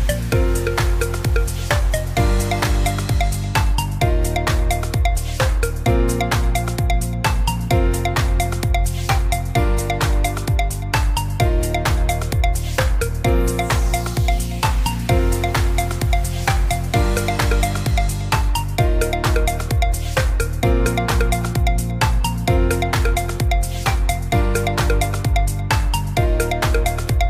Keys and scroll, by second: 14.4-15.6 typing, 23.9 h.